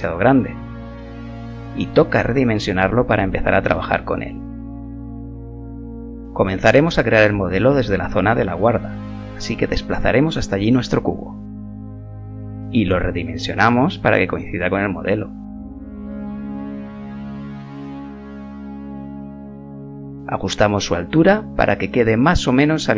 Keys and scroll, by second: 7.5 g, 15.8 g, 19.3 s.